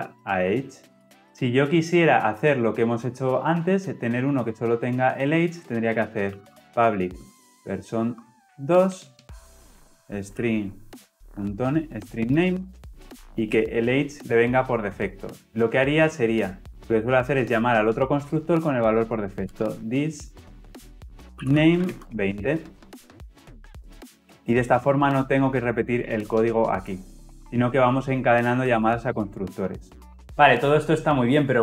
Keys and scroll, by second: 7.1 Return, 23.6 ctrl+alt+l, 23.7 ctrl+alt+o.